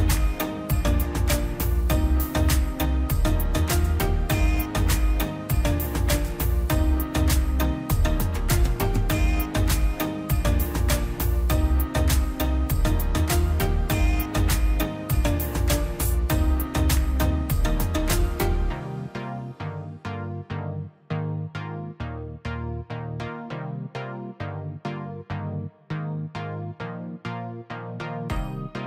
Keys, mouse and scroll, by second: 0.1 scroll up 1, 0.7 click, 2.5 click, 3.6 scroll up 1, 3.8 click, 4.2 middle click, 4.5 scroll up 1, 5.0 middle click, 5.9 click, 6.6-7.0 scroll up 1, 7.0 middle click, 7.3-7.7 scroll up 1, 8.0 click, 10.1-11.5 drag, 11.5 space, 12.1 click, 13.4 right click, 14.0 click, 14.3 scroll down 1, 14.5 click, 15.0-15.4 scroll down 1, 16.1 click, 17.7 middle click, 18.1-18.6 scroll up 1, 18.7-22.8 drag, 22.8 click, 23.1 scroll down 1, 23.3 middle click, 23.6 scroll up 1, 23.8 click, 24.6-25.2 scroll down 2, 24.9 click, 25.4 click, 26.5 ctrl+z, 27.1 click, 27.2 scroll down 1, 27.9 click, 28.0 space, 28.2 click, 28.3-28.8 scroll down 1.